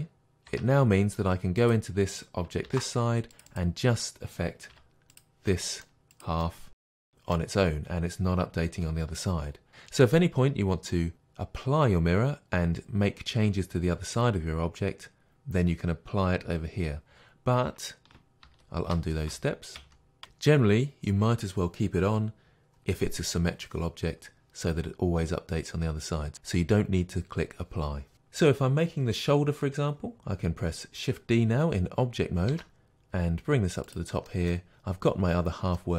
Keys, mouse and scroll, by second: 0.1 click, 0.5 Tab, 1.6 click, 2.7 ctrl+r, 3.6 click, 4.7 2, 5.2 click, 5.5-6.9 middle drag, 6.1 g, 6.4 click, 6.6 g, 6.9 click, 7.0-22.3 middle drag, 18.5 ctrl+z, 28.1 middle click, 32.5 shift+d, 34.0 click, 34.3 middle click.